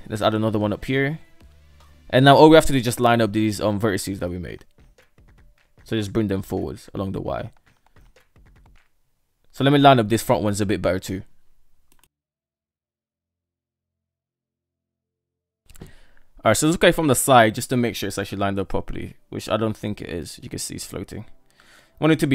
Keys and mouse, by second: 1.3 right click, 2.4 click, 3.8 shift+click, 5.1 g, 9.4 right click, 10.1 g, 11.7-13.7 typing, 11.9 shift+middle click, 12.1 shift+middle click, 13.1 shift+middle click, 13.6 right click, 14.1 middle click, 14.2 click, 14.9 shift+middle drag, 15.5 middle click, 16.3 Tab, 16.8-18.1 middle drag, 18.5 KP_3, 20.9 Tab, 21.7 alt+z, 22.1 click.